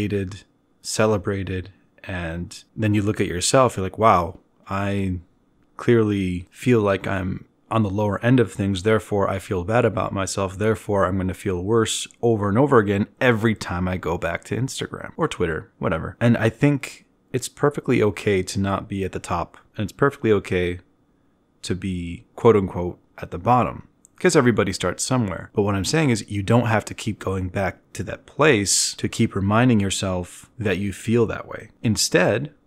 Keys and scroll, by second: 6.7 b, 13.6 e.